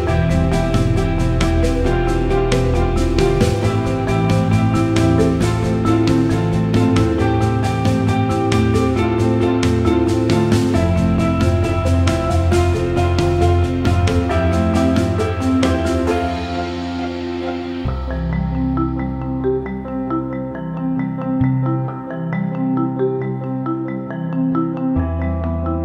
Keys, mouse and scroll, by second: 0.0 ctrl+=, 0.1 space, 0.2 click, 0.7 space, 4.3 scroll down 1, 4.4 space, 4.5 click, 4.6 space, 5.0 ctrl+-, 5.9 click, 7.1 ctrl+Num_Lock, 7.1 click, 7.2 ctrl+-, 7.5 space, 7.7 click, 7.9 space, 8.2 right click, 8.5 click, 9.3-13.6 drag, 13.6-20.0 drag, 22.1 Left, 23.5 click, 24.4 click, 24.4 click.